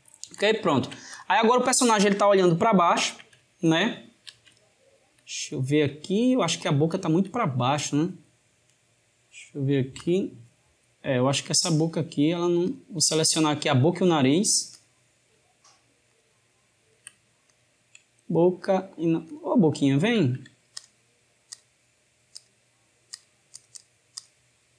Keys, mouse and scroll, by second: 1.0 drag, 2.6-9.7 shift+middle drag, 9.8-11.7 drag, 12.5 click, 13.5 shift+click, 14.6 click, 15.9 shift+click, 16.8 shift+click, 17.2 click, 18.3 shift+click, 19.1 shift+click, 20.6 shift+click, 21.4 shift+click, 22.2 shift+click, 23.0 shift+click, 23.4 shift+click.